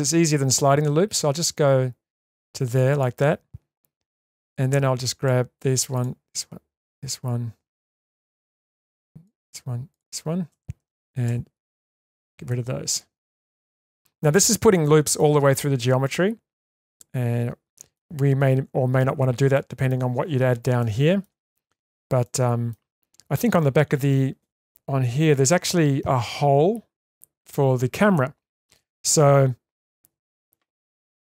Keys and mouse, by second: 4.6 2, 8.7 shift+click, 9.9 shift+click, 11.3 ctrl+x, 12.5-13.8 middle drag, 14.8-15.2 middle drag, 16.0-18.0 middle drag, 19.5 shift+middle click, 20.8 shift+middle click, 22.2 shift+middle click.